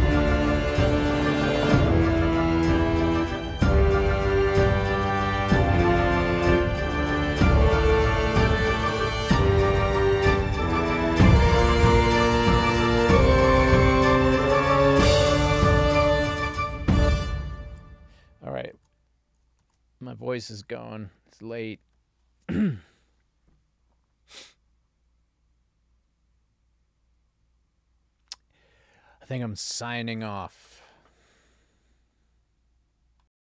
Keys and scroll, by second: 17.1 space, 18.8 super+s, 19.7 ctrl+alt+l.